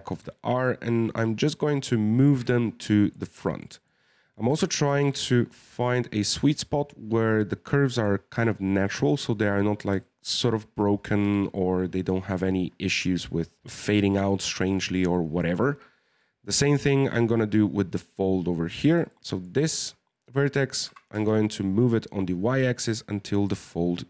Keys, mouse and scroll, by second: 2.4-4.5 middle drag, 4.5 g, 6.4 scroll up 1, 6.4-9.6 middle drag, 10.0-11.2 shift+middle drag, 11.2 KP_1, 15.1-18.6 shift+middle drag, 18.8 right click, 19.1-20.8 middle drag, 20.8 g, 23.6-24.0 middle drag.